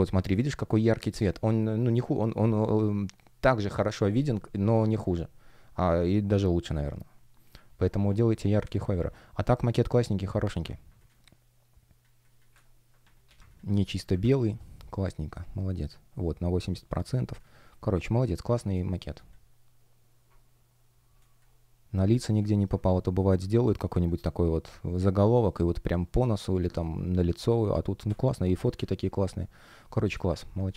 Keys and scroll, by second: 8.9 super+w, 11.0 space, 12.7 super+space, 14.0 super+\, 17.3 space, 21.1 space, 22.4 shift+p, 23.8 F1, 26.0 space, 29.3 space, 30.3 super+w.